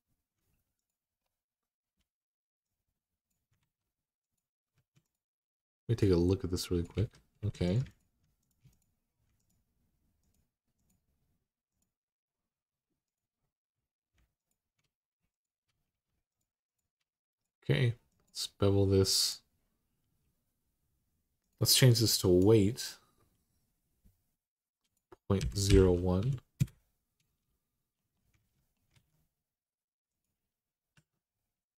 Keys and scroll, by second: 3.4 ctrl+z, 4.5 1, 6.7 ctrl+z, 7.2 2, 25.2-26.0 typing, 26.4 Return, 28.2 alt+z, 28.7 alt+z, 30.7 Tab.